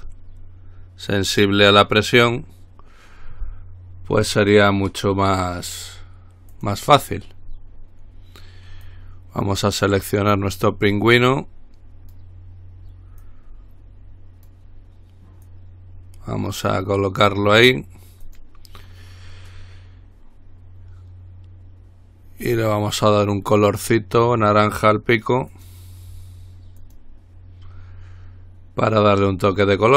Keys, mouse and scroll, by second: 0.4-0.8 scroll up 2, 0.8-1.4 scroll down 2, 1.4 middle click, 1.7-2.2 scroll up 2, 2.6-3.1 scroll up 2, 6.7 click, 7.8-8.4 scroll down 2, 8.4 middle click, 9.0-11.1 drag, 11.4-12.8 drag, 13.4-15.2 drag, 15.6-18.3 drag, 18.4 click, 22.7 click, 25.7 click, 27.0 click.